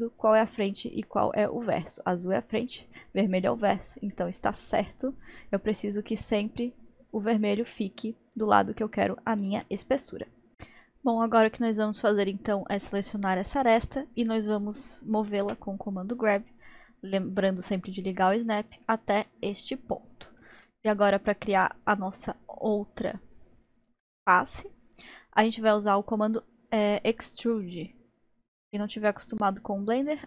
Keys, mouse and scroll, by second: 4.1 middle click, 5.0-5.6 scroll up 1, 15.5 g, 19.3-26.4 middle drag, 30.1-30.2 drag.